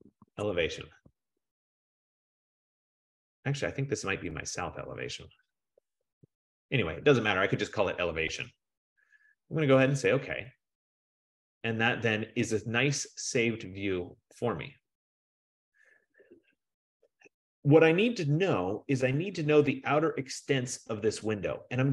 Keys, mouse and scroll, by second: 0.0-2.2 typing, 2.8 F15, 4.5 click, 4.7 click, 5.7-6.8 typing, 8.7 BackSpace, 10.0 click, 12.7 click.